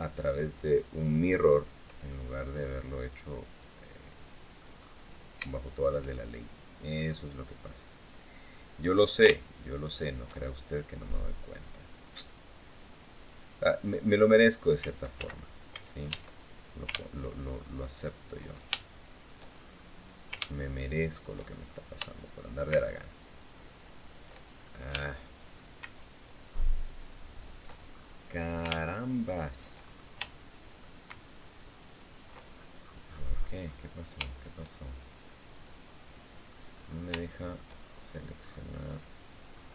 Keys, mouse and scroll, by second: 1.8-4.5 middle drag, 4.5-5.0 scroll up 1, 5.2 shift+middle click, 9.2 ctrl+shift+right click, 10.1 ctrl+shift+middle click, 12.9 click, 13.3-13.8 scroll up 1, 14.9 ctrl+z, 15.8 a, 17.3 ctrl+shift+right click, 18.5 ctrl+shift+middle click, 19.3-19.8 shift+scroll up 1, 20.5 ctrl+shift+right click, 21.2-21.7 ctrl+shift+scroll up 1, 21.8 shift+middle click, 23.1 ctrl+shift+right click, 23.7 ctrl+shift+right click, 24.3-24.7 ctrl+shift+scroll up 3, 24.8 shift+middle click, 26.3 ctrl+shift+right click, 26.7 ctrl+shift+right click, 27.3 ctrl+shift+right click, 27.6-28.1 ctrl+shift+scroll up 1, 28.9 ctrl+shift+right click, 29.5-30.0 ctrl+shift+scroll up 1, 30.0 shift+middle click, 31.2 ctrl+shift+right click, 32.3-33.6 ctrl+shift+scroll down 1, 34.1 shift+click, 35.0-36.4 drag, 36.5-37.0 scroll up 1, 37.0 shift+click, 37.5-38.1 shift+scroll up 1, 39.3-39.6 scroll up 2.